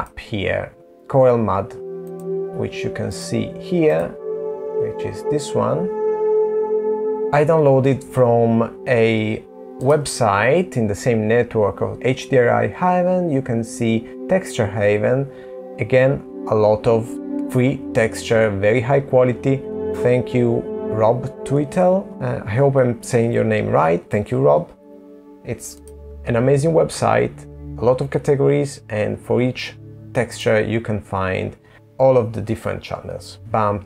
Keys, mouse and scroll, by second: 3.2-4.4 scroll down 7, 4.4 scroll up 2.